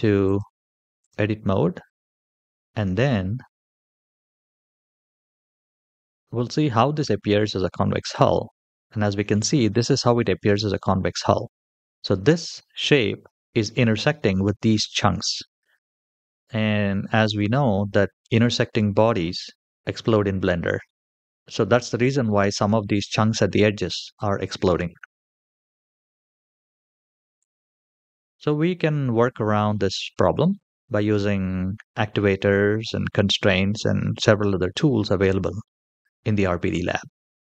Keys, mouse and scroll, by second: 0.0-1.0 drag, 3.5 a, 4.6-8.0 drag, 25.8 ctrl+z, 26.2 ctrl+z, 27.2 ctrl+z, 27.7 ctrl+z, 28.1 ctrl+z, 29.0-29.5 middle drag, 30.0 shift+middle click, 30.6 shift+middle click, 31.1 middle click, 31.9-32.2 shift+middle drag, 32.6-33.5 middle drag, 34.9-35.4 scroll up 1, 35.4-36.3 middle drag, 36.6 shift+middle click, 37.2 middle click.